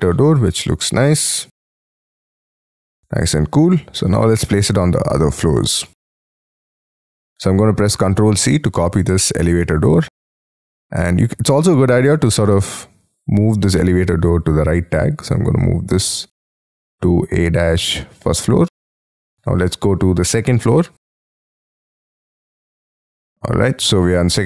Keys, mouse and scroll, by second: 0.1 middle click, 3.5-4.3 scroll down 12, 4.3-7.4 scroll up 10, 8.4 ctrl+c, 12.2 double click, 12.7 double click, 23.3 middle click.